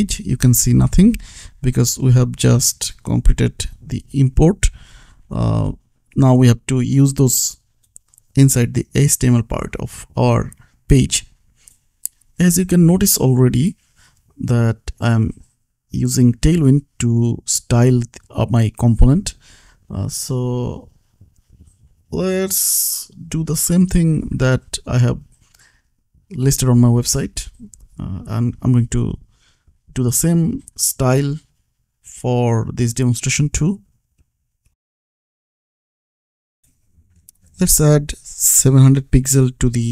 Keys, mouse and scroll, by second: 0.1 click, 0.9 Return, 3.8 click, 6.2 click, 8.4 click, 9.6-11.0 scroll down 1, 11.0 click, 13.4 click, 16.0 click, 18.3 BackSpace, 19.5 click, 22.0 click, 24.0-25.3 typing, 26.0 Up, 26.3 space, 26.7 c, 27.4 l, 28.6-29.5 typing, 31.5-34.7 typing, 38.6 Left, 39.2 KP_7, 39.4 KP_0.